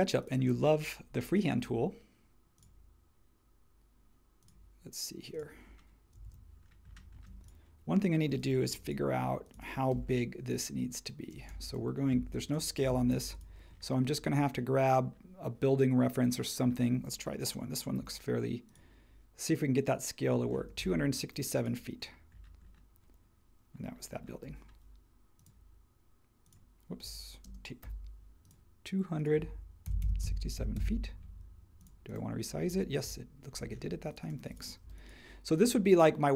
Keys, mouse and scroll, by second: 6.2 super+1, 7.2 space, 8.7 m, 9.5 space, 9.9 l, 11.3 space, 13.1 super+g, 17.9 t, 20.3 Escape, 24.4 l, 27.4-27.8 typing, 29.6-30.7 typing, 33.0 super+[, 33.8 space, 34.8 m, 35.6 space.